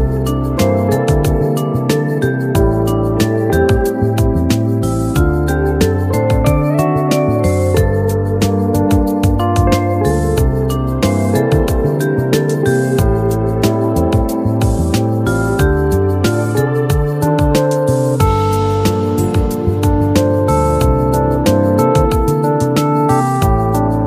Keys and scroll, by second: 12.2 ctrl+a, 21.7 ctrl+q.